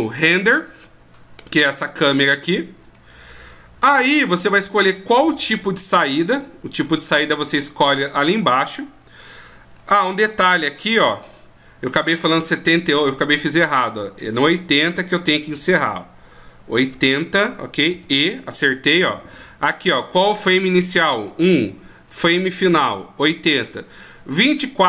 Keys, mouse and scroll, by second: 2.9 click, 7.8 scroll down 1, 9.7 scroll down 4, 12.6 scroll up 6, 14.1 click, 17.9 e.